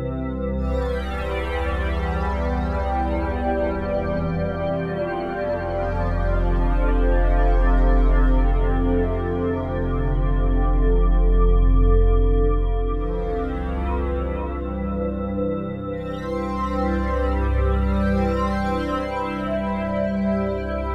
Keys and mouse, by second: 0.3 click, 1.1-17.7 drag, 17.7 ctrl+s, 18.8-20.9 drag.